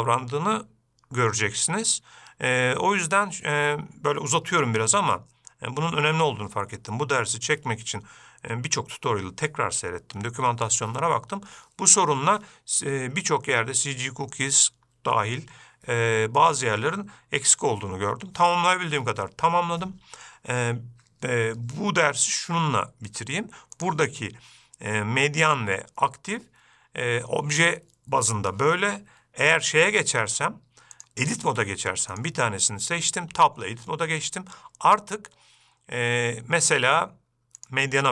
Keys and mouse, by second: 24.4-27.1 drag, 32.5 click, 33.8 Tab.